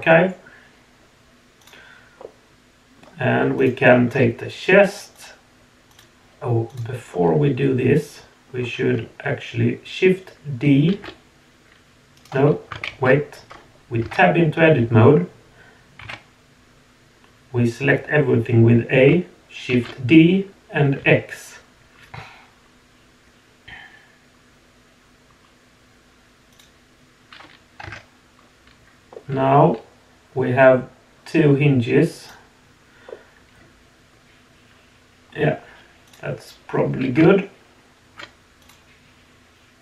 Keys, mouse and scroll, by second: 1.6 click, 2.2-3.0 middle drag, 3.5 click, 5.1 click, 6.7 click, 7.1-8.5 middle drag, 10.9 shift+d, 12.9 ctrl+z, 14.0 Tab, 19.7 shift+d, 27.8 Tab, 29.1-30.6 middle drag, 32.2 click, 33.0-35.3 middle drag, 33.6 click, 33.9 click, 36.1 click, 38.6 click.